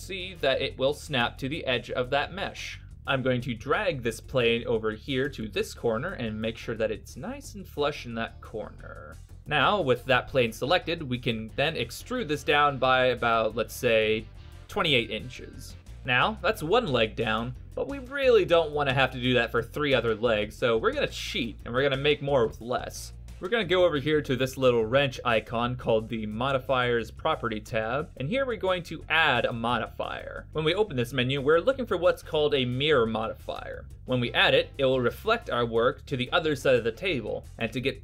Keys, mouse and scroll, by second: 2.8 middle click, 3.7 alt+middle click, 5.7 middle click, 5.7-6.7 scroll up 2, 9.3 middle click, 9.3-9.8 scroll down 4, 9.9 e, 14.4 BackSpace, 16.4 middle click, 19.7 middle click, 20.0-22.1 scroll down 3, 20.4 middle click, 22.1 right click, 22.7 Tab, 22.9 right click, 28.3 click, 32.3 click, 37.3 middle click.